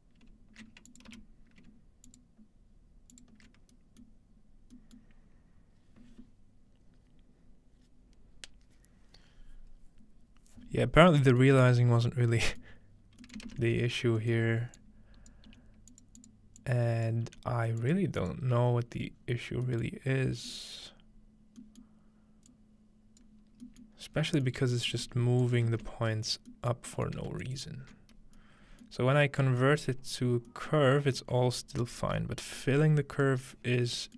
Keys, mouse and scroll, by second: 0.9 click, 1.1 m, 2.1 click, 3.1 click, 3.5 click, 3.8-10.4 middle drag, 4.4-6.3 scroll down 1, 11.4 middle drag, 12.0-12.6 middle drag, 12.0-13.3 scroll up 3, 13.0 middle click, 13.4-15.7 middle drag, 13.7-15.5 scroll down 1, 14.8-19.7 drag, 15.5 g, 17.3 g, 18.7-19.2 scroll up 1, 19.2 scroll down 1, 19.7-21.7 middle drag, 22.5 click, 23.5-24.1 scroll down 1, 24.1 scroll up 1, 24.7 click, 25.0 g, 25.1 click, 25.6-27.1 ctrl+drag, 25.7 ctrl+space, 27.4 alt+shift+click, 28.0 click, 28.0 middle click, 28.4 click, 28.4 middle click, 28.4-30.3 scroll up 1, 31.8-33.5 alt+shift+drag.